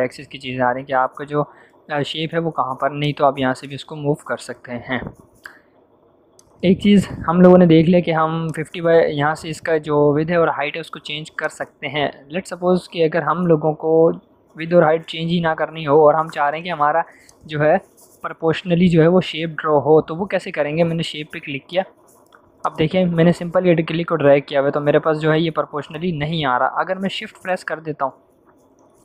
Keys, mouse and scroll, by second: 11.3 click, 17.2 click, 21.0 click, 21.0-29.0 drag.